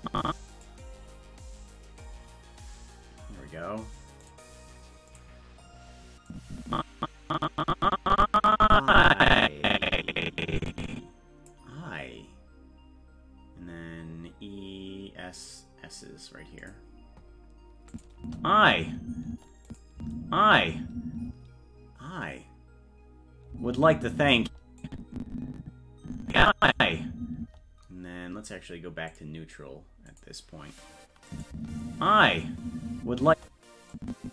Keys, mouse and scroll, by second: 3.0-3.6 scroll down 1, 3.9 scroll down 1, 4.2 click, 5.1 click, 6.3-11.5 drag, 15.3 click, 16.6 click, 17.9 click, 18.2 space, 19.7 click, 19.9 space, 24.3 space, 24.8-26.7 drag, 24.8 space, 26.7 space, 29.1 click, 30.0 click, 31.3 click, 31.5 space, 33.9-34.3 drag.